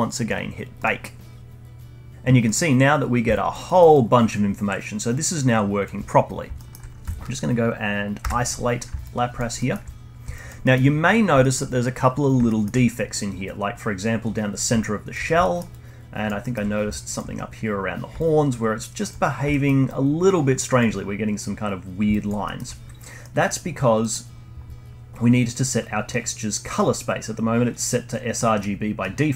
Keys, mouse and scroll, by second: 0.7-2.1 drag, 2.4 middle click, 2.9-3.3 scroll up 2, 3.3-3.6 alt+drag, 3.6 alt+middle drag, 3.9-6.5 alt+drag, 6.5-8.2 alt+middle drag, 8.2 /, 9.0-9.5 alt+drag, 9.5-9.9 alt+middle drag, 9.9-10.3 scroll up 3, 10.3-10.6 alt+drag, 10.6-11.0 alt+middle drag, 11.0-11.4 scroll up 2, 11.4-12.9 alt+middle drag, 12.9-14.1 scroll up 10, 14.1-14.7 scroll down 8, 14.7-15.2 alt+drag, 15.2 scroll down 1, 15.4-15.7 alt+middle drag, 15.7-16.4 alt+drag, 16.4 alt+middle drag, 16.6 scroll up 1, 16.9-17.7 alt+drag, 17.7-18.1 scroll down 2, 18.1-19.1 alt+drag, 19.1-19.5 scroll down 1, 19.5-19.8 alt+middle drag, 19.8-20.9 alt+drag, 20.9-21.3 scroll up 2, 21.8-22.4 scroll down 2, 22.1 alt+drag, 22.4-23.6 alt+middle drag, 23.6-24.0 scroll up 1, 24.0 middle click, 24.2-26.6 scroll up 1, 26.6-27.3 scroll up 1, 28.1 scroll down 1, 28.3-29.3 middle drag.